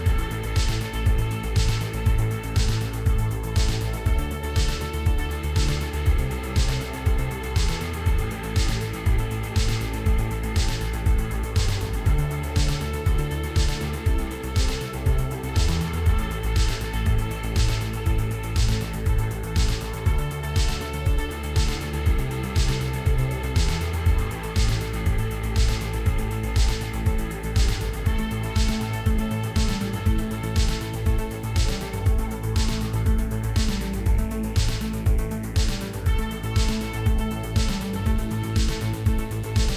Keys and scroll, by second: 2.3 Tab, 4.2 ctrl+2, 10.7 shift+a, 12.9 r, 13.9 -, 14.1 9, 14.6 Return, 16.0 r, 16.7 y, 17.0 -, 17.2 9, 17.7 Return, 25.8 2, 26.2 Return.